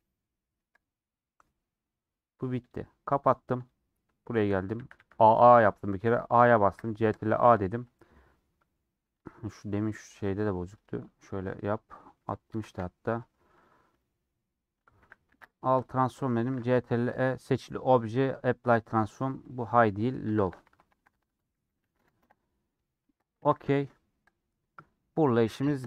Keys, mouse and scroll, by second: 0.7 click, 1.0-2.6 middle drag, 2.6-5.3 drag, 5.3 middle click, 6.0 a, 7.5-16.4 drag, 16.4 ctrl+shift+e.